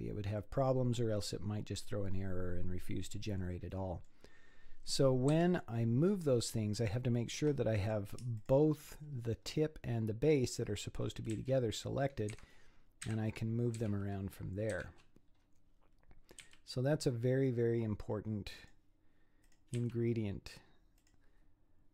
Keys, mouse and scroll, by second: 0.4-3.6 middle drag, 4.7 scroll up 7, 5.3 z, 6.0-6.8 scroll up 6, 6.8 shift+click, 7.8 click, 8.4 shift+click, 9.3-10.5 scroll down 13, 11.3 g, 13.0 KP_1, 13.8 z, 14.7 z, 15.4 scroll up 3, 16.4 g, 19.4 click, 19.8 g.